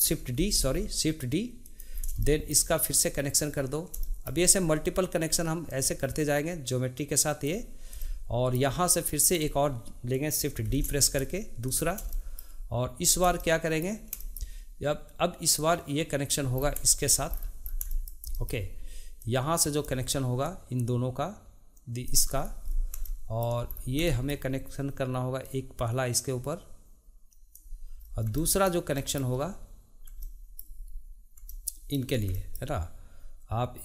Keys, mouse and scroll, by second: 0.4 shift+d, 2.0 scroll down 1, 2.2-5.6 shift+middle drag, 5.6-8.0 drag, 8.0-9.2 shift+middle drag, 9.2 click, 10.7 shift+d, 12.1 shift+middle click, 13.0 scroll up 2, 13.4-15.6 shift+middle drag, 15.6-16.6 drag, 16.6 scroll down 2, 16.8 shift+middle click, 17.3-17.9 scroll down 2, 17.9-19.2 shift+middle drag, 19.2-20.5 drag, 22.4-23.0 scroll up 4, 23.0-23.7 shift+middle drag, 23.7-24.1 scroll down 2, 24.1-25.4 shift+middle drag, 25.4-28.0 drag, 28.0-28.4 scroll up 2, 28.4-33.8 shift+middle drag.